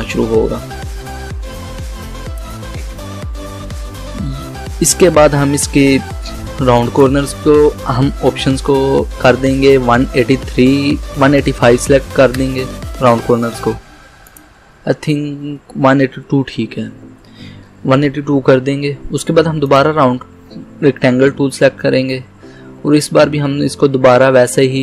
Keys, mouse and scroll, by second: 6.8 click, 9.7-10.7 typing, 12.2 5, 12.4 Return, 14.3 click, 15.3 Left, 15.6 BackSpace, 15.8 2, 16.2 Return, 19.7 click.